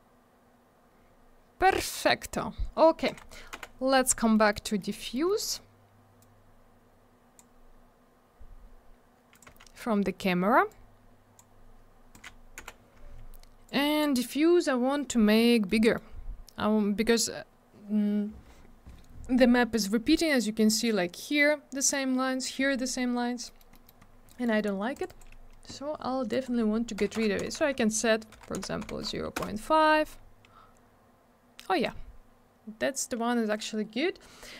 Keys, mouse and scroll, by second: 1.1-2.3 scroll down 1, 3.1 click, 3.2 click, 3.6 m, 4.2 middle click, 4.3 middle click, 4.5 middle click, 4.7 double middle click, 4.8 middle click, 4.9 middle click, 5.0 middle click, 5.1 double middle click, 5.3 middle click, 5.4 middle click, 6.2 click, 9.3 click, 9.4 click, 10.7 click, 12.2 click, 12.3 click, 12.6 m, 13.7 click, 15.6 middle click, 15.7 middle click, 15.9 middle click, 16.0 double middle click, 23.5 middle click, 23.6 middle click, 23.7 middle click, 23.9 double middle click, 24.0 scroll up 1, 24.3 middle click, 24.5 middle click, 24.6 scroll up 1, 24.7 double middle click, 25.0 click, 25.0 click, 25.1 click, 25.2 double click, 26.3 click, 26.4 click, 27.0 0, 27.6 Tab, 28.3 0, 29.4 Return, 30.8-31.7 scroll up 1, 31.7 scroll down 1, 34.5 middle click.